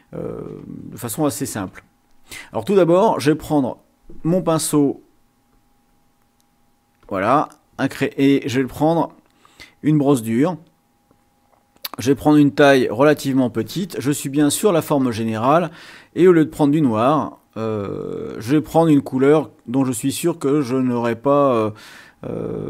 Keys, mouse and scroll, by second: 5.4 click, 7.0 click, 8.5 click, 10.0 click, 12.2-13.2 drag, 16.0 click, 17.7 click.